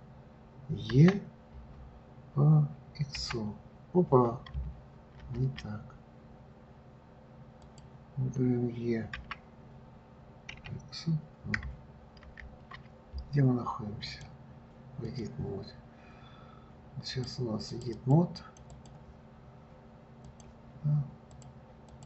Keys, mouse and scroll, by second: 8.0 click, 14.4-17.6 drag, 18.0 click, 18.3 click, 18.7 click, 19.0 click, 20.6 click, 21.7 click.